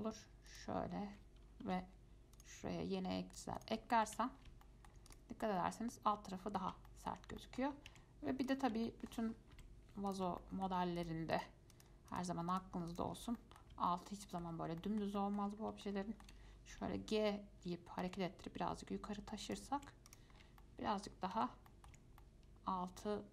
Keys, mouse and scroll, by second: 1.8 ctrl+r, 4.1-4.7 scroll down 4, 4.3 Tab, 4.8 shift+middle click, 5.3 click, 5.6 scroll up 2, 5.8-8.1 middle drag, 8.1 Tab, 8.7 click, 9.1 shift+middle click, 9.5 scroll up 2, 9.7 typing, 10.3 click, 10.6 shift+middle click, 11.2 shift+click, 11.5 shift+click, 11.9 shift+click, 12.3 shift+click, 12.7 shift+click, 13.1 shift+click, 13.4-13.9 scroll down 3, 13.6 middle click, 14.1-15.8 shift+middle drag, 15.8 scroll up 2, 16.0 shift+middle click, 16.9 g, 20.0 Tab, 20.3 click, 20.6 scroll down 3, 20.8-21.5 shift+middle drag, 21.5 Tab, 21.9 middle click, 22.1 Tab, 22.4-23.3 middle drag.